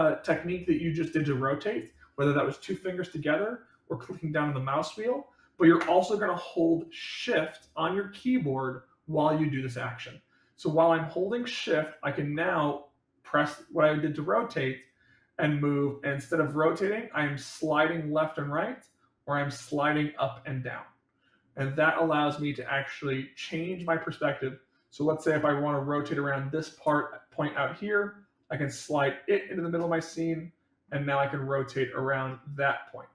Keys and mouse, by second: 12.3-25.0 shift+middle drag, 27.5-29.7 shift+middle drag, 30.1 middle click, 31.1-31.9 middle drag, 32.2-33.1 middle drag.